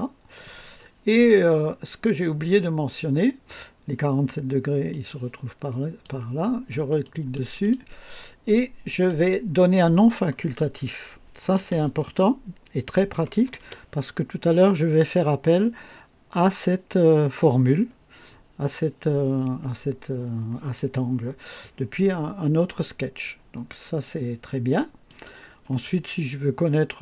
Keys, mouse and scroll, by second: 4.9-6.2 drag, 7.0 click, 8.9 click, 11.3-14.1 typing, 25.1 click.